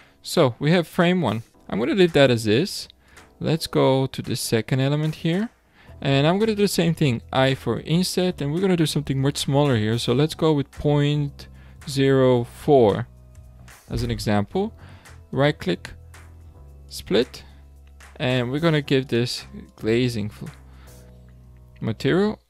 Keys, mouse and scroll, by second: 2.7 3, 3.1 click, 7.3 i, 15.3-18.3 right drag, 19.0 click, 19.7-21.5 drag, 21.5 alt+a.